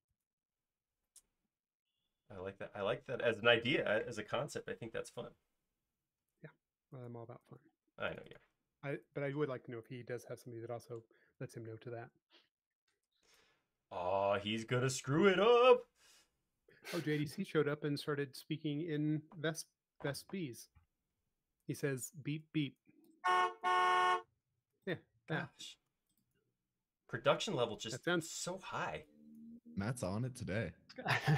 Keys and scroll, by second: 1.1 p, 2.2 p, 6.3 space, 12.9 f, 15.1 p, 19.2 space, 19.6 e, 31.1 alt+space.